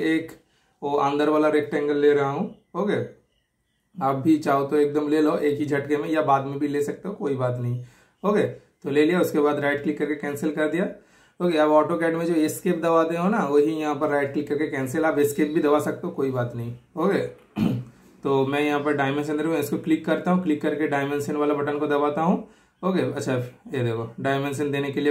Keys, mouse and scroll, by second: 1.4-2.3 typing, 2.3 super+click, 6.2 super+click, 6.3 super+click, 9.4 right click, 10.2 super+click, 19.8 super+click, 22.5 typing.